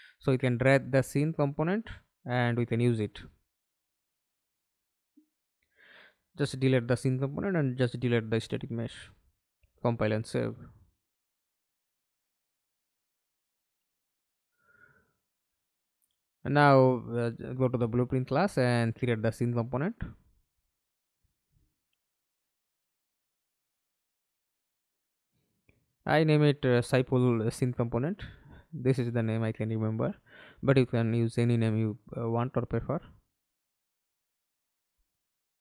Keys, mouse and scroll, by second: 2.7 Delete, 6.2 Delete, 8.2 Delete, 10.5 double click, 11.1 middle click, 11.6 ctrl+space, 14.1 alt+F9, 14.4 middle click, 15.0 ctrl+space, 17.1 right click, 25.9-33.8 typing.